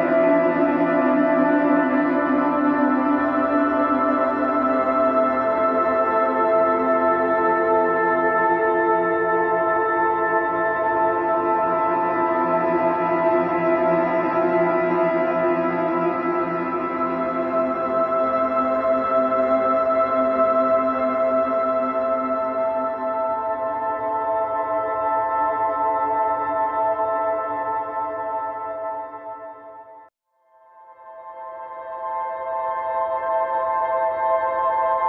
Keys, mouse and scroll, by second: 2.4 click, 3.4 g, 5.2 middle click, 6.0 g, 7.4 middle click, 7.7-8.5 scroll up 2, 8.5 ctrl+r, 11.2 click, 12.8 e, 13.9-15.9 middle drag, 16.3-17.4 middle drag, 17.4-19.6 drag, 20.3 click, 22.2 click, 22.7-24.0 middle drag, 24.0 click, 24.9-25.8 right drag, 25.8 middle click, 26.7-28.8 drag, 29.1 middle click, 29.9 ctrl+r, 33.8 a.